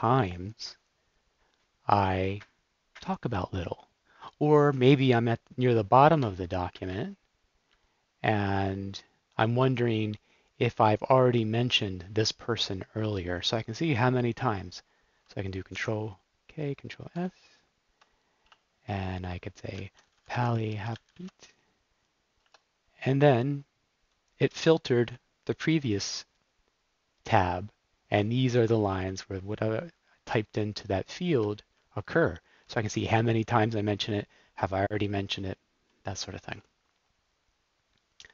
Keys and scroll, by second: 15.7 super+k, 17.2 super+s, 18.7-21.5 typing, 22.3 Return, 24.2 typing, 29.0 Down, 30.4 Up, 31.6 Down, 36.4 super+w.